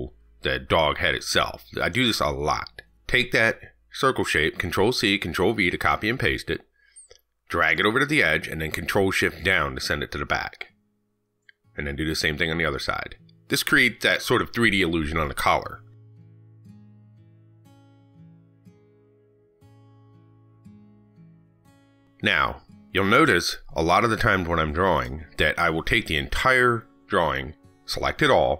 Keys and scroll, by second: 3.0 ctrl+z, 6.7 ctrl+c, 6.8 ctrl+v, 10.0 ctrl+shift+Down, 13.4 ctrl+c, 13.6 ctrl+v, 17.2 ctrl+shift+Down.